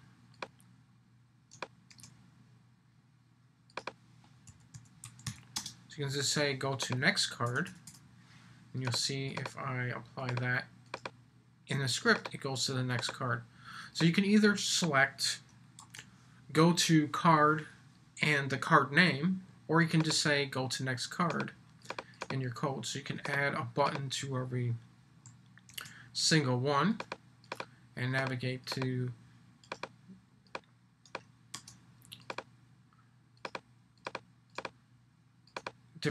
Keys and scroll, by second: 1.9 super+v, 15.8 super+c, 25.7 super+v, 31.5 super+c.